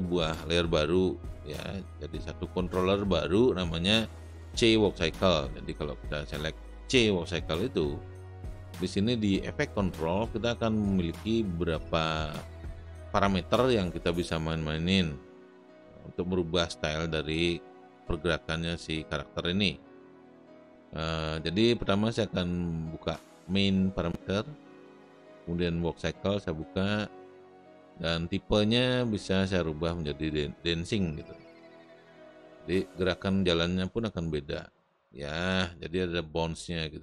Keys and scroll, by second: 34.2 space.